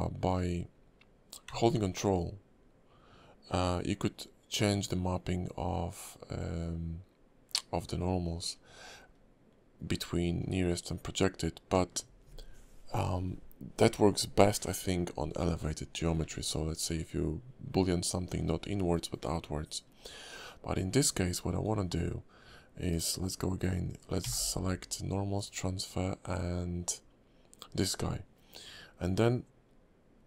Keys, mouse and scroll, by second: 24.2 y.